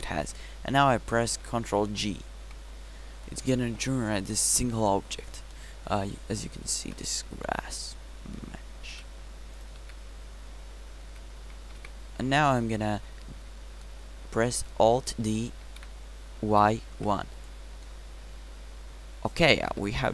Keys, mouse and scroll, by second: 2.9 ctrl+j, 6.8 KP_Decimal, 9.0 g, 10.4 Tab, 11.1 a, 11.5 a, 12.1 Tab, 16.2 alt+d, 19.7 KP_7.